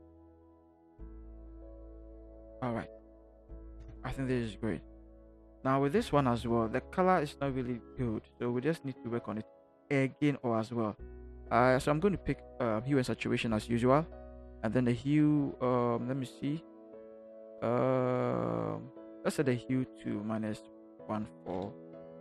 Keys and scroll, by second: 3.8 Return, 20.7 1.